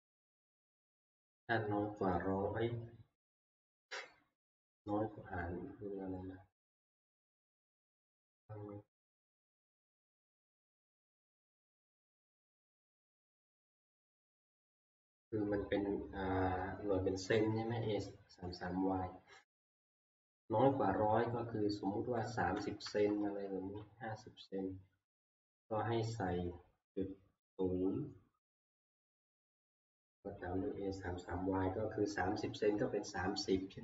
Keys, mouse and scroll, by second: 20.9-22.1 Left, 22.5 Right, 22.8 Right, 23.4 Right, 23.6 Right, 25.6 Right, 26.1 Right, 26.2 Right, 26.2 Right.